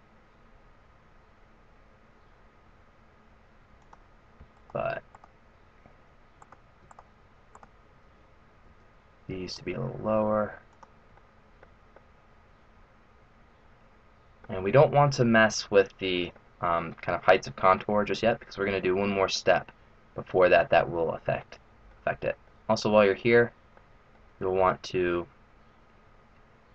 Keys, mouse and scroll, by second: 4.5 right click, 5.2 shift+right click, 6.3 right click, 7.0 shift+right click, 7.6 shift+right click, 8.7 g, 11.3 middle click, 12.0 middle click, 16.3 middle click, 18.4 middle click, 19.6-20.1 scroll down 3, 20.1-20.7 scroll up 2, 21.4 middle click, 22.5 middle click, 24.0 middle click, 24.5 scroll up 1.